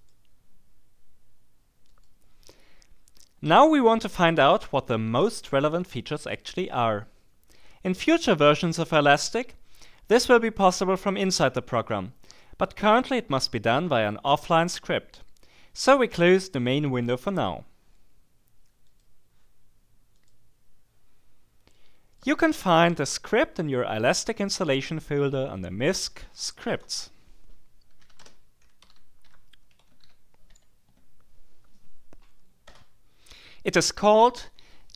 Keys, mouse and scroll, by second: 1.9-2.5 scroll up 2, 18.9 click, 20.2 click, 21.7 click, 27.8-31.0 typing, 32.6 Return.